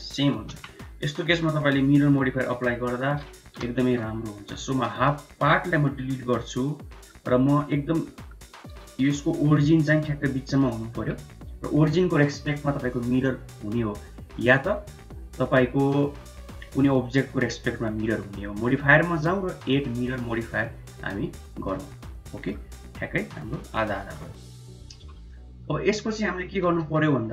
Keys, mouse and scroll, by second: 0.4 KP_1, 2.0 ctrl+r, 3.2 shift+z, 3.6 1, 3.9 click, 4.7 x, 5.8 Tab, 6.2-6.9 middle drag, 7.9 click, 7.9 right click, 8.8 shift+z, 15.7 click, 18.4 click, 18.9-21.5 drag, 22.1 middle click, 23.5 KP_1, 23.8 KP_3, 24.8 KP_1, 25.1-25.5 middle drag, 25.7 Tab, 26.0 middle click, 26.6 3.